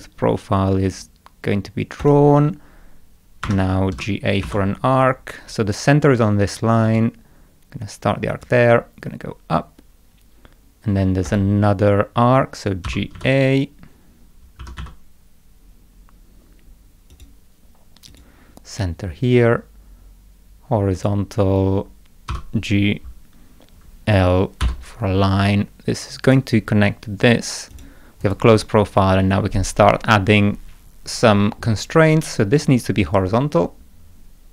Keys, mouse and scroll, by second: 2.0 click, 3.4 Escape, 3.9 g, 4.4 a, 6.9 click, 8.3 click, 11.3 click, 12.9 g, 13.1 a, 14.4-15.3 typing, 17.1 click, 18.1 click, 21.0 click, 22.3 g, 24.6 l, 26.3 click, 27.7 click, 28.2 right click, 28.6 click, 32.6 click.